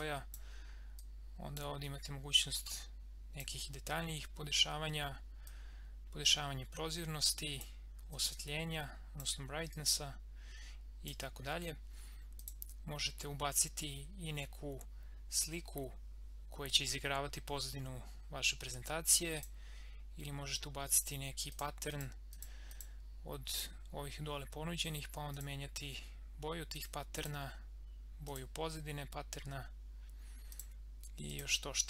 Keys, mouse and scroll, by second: 19.3 click, 30.5 click.